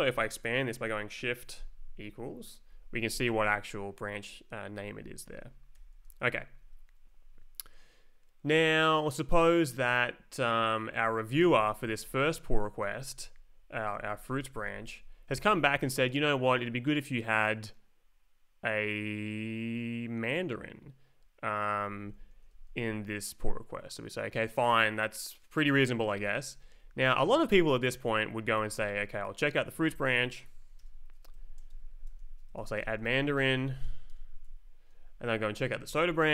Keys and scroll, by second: 1.5 shift+=, 5.7 shift+=, 7.3 Up, 11.5 Down, 12.1 shift+Down, 12.8 Left, 13.2 Right, 13.7 Up, 13.9 Down, 14.2 Up, 14.6 shift+Down, 15.0 Up, 15.3 Down, 15.5 Up, 22.0 Down, 22.4 Up, 26.1 Left, 26.6 Down, 26.8 Right, 27.9 Left, 28.8 space, 29.7 Right, 31.0-34.3 typing, 31.3 Escape, 34.9 Left, 35.3 Down, 35.9 space.